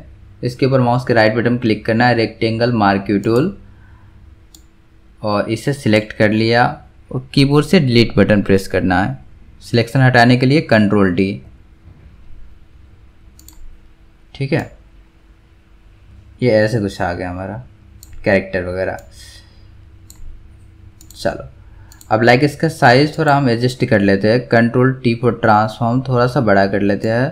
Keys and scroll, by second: 11.3 ctrl+d, 25.1 ctrl+t.